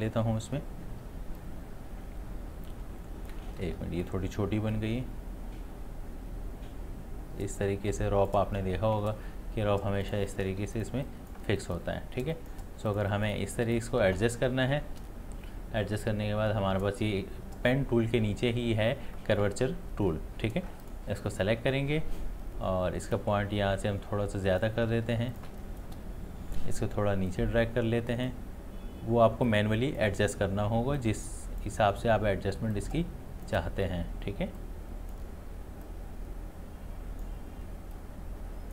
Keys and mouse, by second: 1.4-3.6 drag, 3.6 ctrl+z, 4.7-10.0 drag, 10.6 space, 10.8 ctrl+click, 11.5 space, 11.6 click, 12.2 space, 12.3 click, 20.8 click, 23.1-24.9 drag, 24.9 space, 25.3 ctrl+alt+click, 27.3-38.7 ctrl+drag.